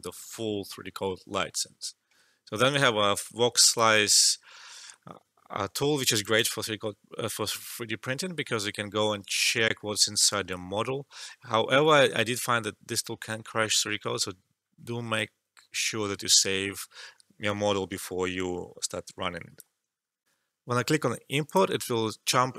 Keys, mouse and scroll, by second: 3.5 click, 5.9 alt+middle click, 6.2 alt+click, 7.9-15.3 drag, 17.5-19.8 drag, 20.2 alt+F12, 21.4 click.